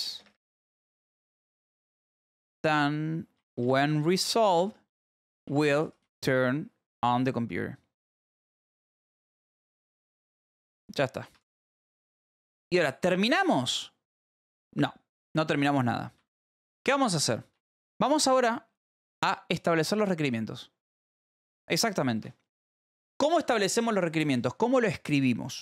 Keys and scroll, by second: 0.0-6.5 typing, 8.5-10.8 typing, 11.8 ctrl+s, 14.5 k, 15.3 a, 15.7 Return, 16.1 Up, 17.0 space, 17.9 @.